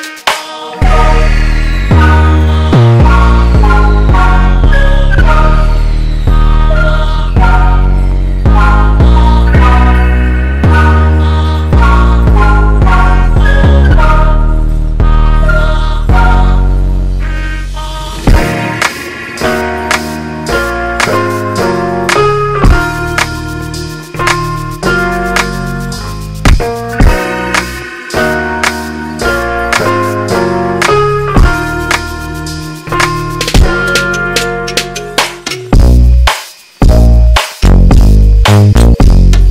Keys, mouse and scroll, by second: 1.7 g, 8.7 right click, 8.9 g, 22.9 g, 29.6 middle click, 33.4 g, 37.9 g.